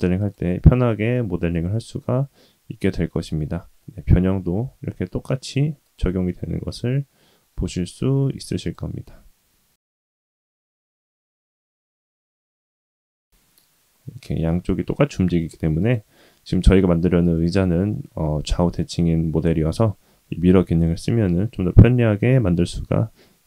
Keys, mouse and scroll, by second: 0.5 middle click, 1.7-2.0 shift+middle drag, 2.1 scroll up 2, 2.8 click, 3.4 Tab, 3.8 middle click, 4.5 g, 6.2 middle click, 8.6 click, 10.2 middle click, 10.7 g, 12.3 alt+click, 13.1 g, 16.1 middle click, 16.8 scroll down 1, 17.3 shift+middle click, 17.9 middle click, 20.2 scroll up 2, 20.5 scroll down 2, 21.2 Tab.